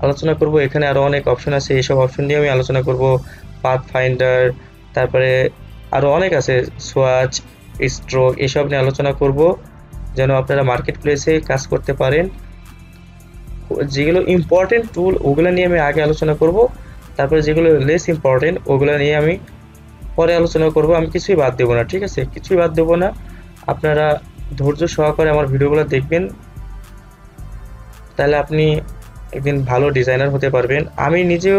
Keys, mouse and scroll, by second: 0.6-2.7 drag, 10.3 click, 25.2-27.7 drag.